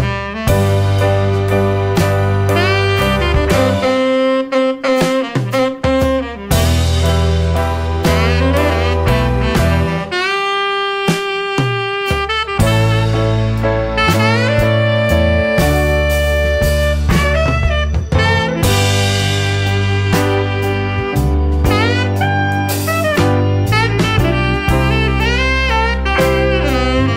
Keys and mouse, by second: 3.7-5.3 drag, 6.9 shift+middle click, 7.4-8.4 middle drag, 9.0-9.5 middle drag, 12.3 click, 15.3-15.8 middle drag, 17.2 click, 18.4-24.6 drag, 25.5-26.2 middle drag, 26.9-27.1 drag.